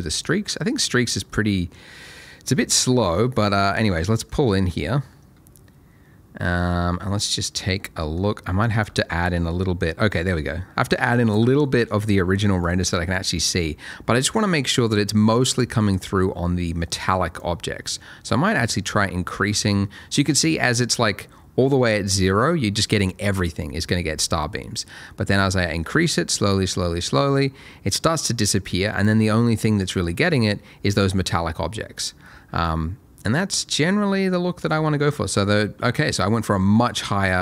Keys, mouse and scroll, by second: 1.3 middle click, 3.5 scroll up 1, 4.0 shift+middle click, 4.4 middle click, 7.8 middle click, 8.8 click, 11.6 middle click, 11.8 click, 17.4 click, 29.5 middle click, 31.4 scroll down 1.